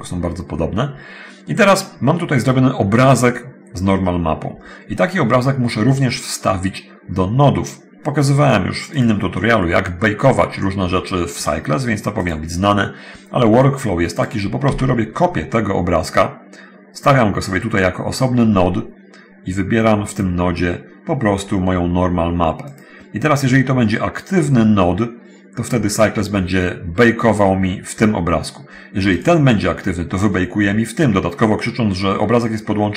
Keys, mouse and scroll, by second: 9.1 click, 12.3 click, 14.3 click, 14.4 shift+d, 17.1 click, 20.3 click, 22.9 click, 29.3 click.